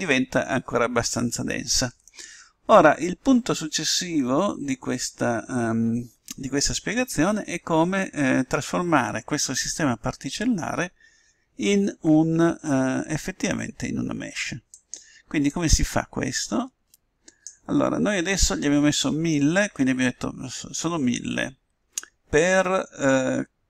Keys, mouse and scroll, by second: 16.3-18.0 drag.